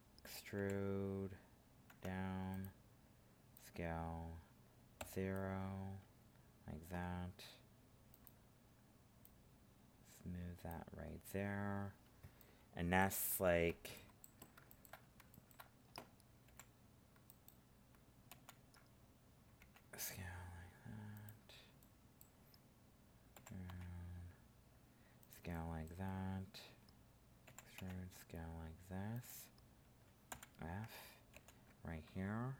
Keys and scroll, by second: 18.3 ctrl+z, 31.3 ctrl+f.